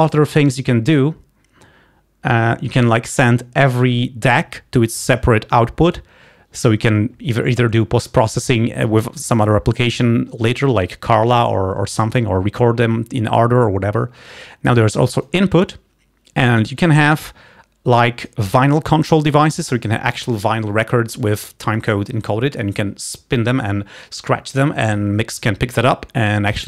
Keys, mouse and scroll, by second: 0.3-0.6 scroll down 2, 2.9 click, 3.9-7.3 drag, 18.4 click.